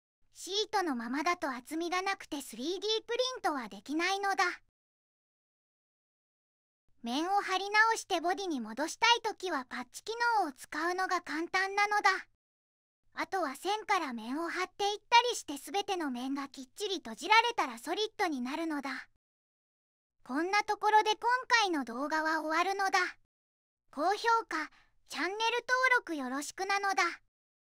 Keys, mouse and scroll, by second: 14.6 click, 14.7 click.